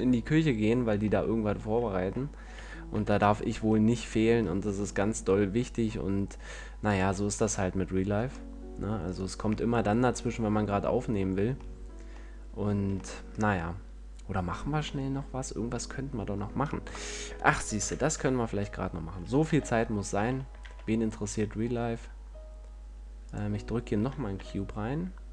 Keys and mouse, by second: 2.8 z, 3.2 KP_5, 7.2-9.0 drag, 9.4-14.7 drag, 17.2 KP_1, 18.1 KP_5, 18.4 z, 19.8 Tab, 20.6 a, 24.6 g.